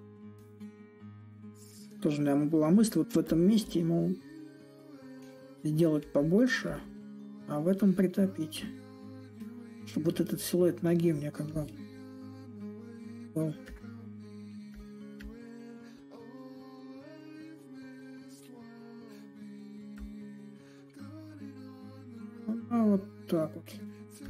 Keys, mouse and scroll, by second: 0.0-1.6 drag, 1.6 s, 3.0-8.0 drag, 8.5-13.5 drag, 14.4-19.5 drag, 19.6-24.2 drag.